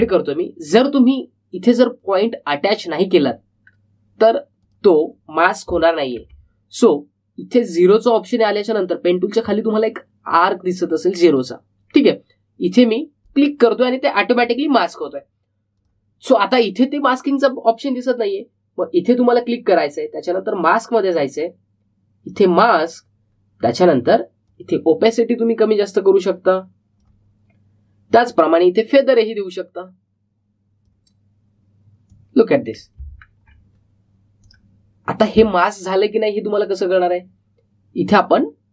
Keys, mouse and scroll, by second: 0.8 ctrl+z, 3.7-4.5 scroll up 1, 4.5-4.8 scroll down 1, 5.5 click, 7.1 ctrl+z, 14.2 click, 15.6-16.0 alt+scroll down 1, 16.4-17.1 typing, 16.6 click, 20.1 click, 25.4-34.1 drag, 34.1-34.5 alt+scroll down 1, 35.3 click, 37.5 click.